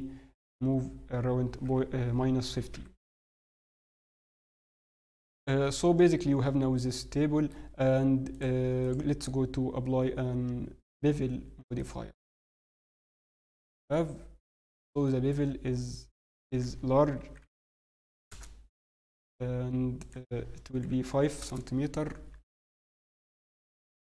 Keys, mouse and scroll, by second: 3.3-4.4 scroll down 2, 3.6 middle click, 4.4 Tab, 4.8 middle click, 8.3 click, 12.4 middle click, 14.5 scroll up 1, 15.0 shift+middle click, 15.0-15.4 scroll up 2, 16.3 click, 16.3 scroll up 1, 20.0 click, 23.5-24.0 click.